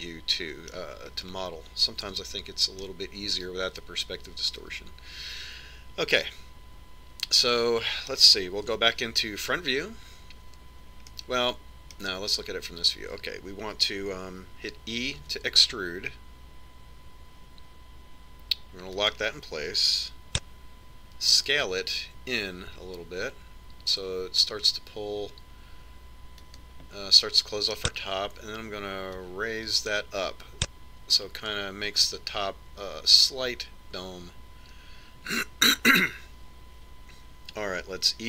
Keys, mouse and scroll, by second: 2.3-5.9 middle drag, 3.3 KP_Decimal, 9.9 KP_1, 12.3-14.4 middle drag, 16.5 e, 22.5 s, 28.6-30.4 middle drag, 30.6 click.